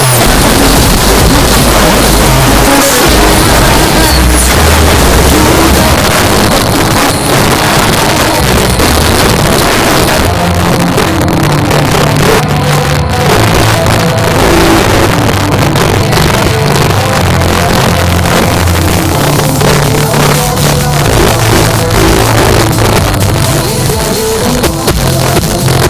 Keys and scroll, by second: 5.9 Page_Down.